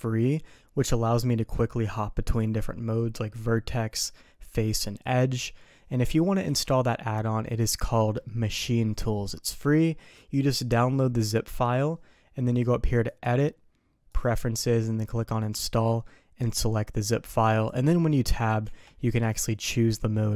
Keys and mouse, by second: 13.1-14.3 drag, 18.6 Tab.